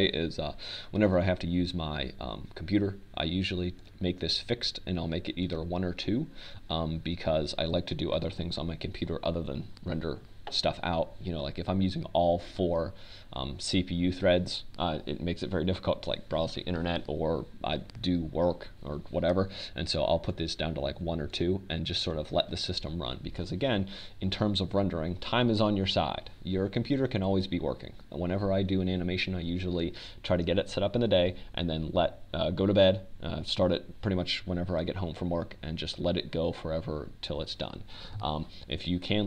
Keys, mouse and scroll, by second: 7.5-10.6 drag, 23.6-27.1 drag.